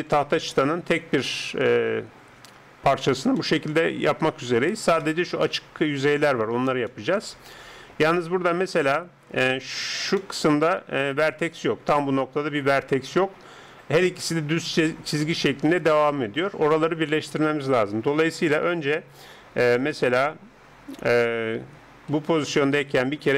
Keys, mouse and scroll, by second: 1.9 KP_7, 3.4-12.9 middle drag, 16.8-18.6 middle drag, 18.6 right click, 19.8-22.1 middle drag, 22.1 a, 22.6 a.